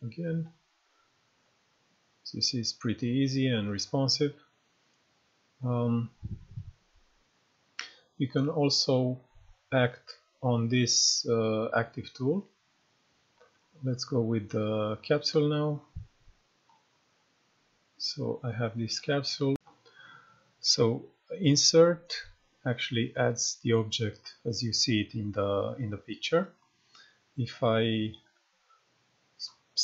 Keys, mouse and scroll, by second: 0.0-1.4 typing, 1.8-4.8 right drag, 7.1-8.0 right drag, 13.3 click, 15.7-16.7 scroll up 1, 16.7 click, 17.4-17.9 scroll down 1, 17.9-18.5 scroll up 1, 18.5-19.1 scroll down 1, 19.5 ctrl+F12, 20.0-26.5 drag, 26.2 right click, 27.9-29.4 drag.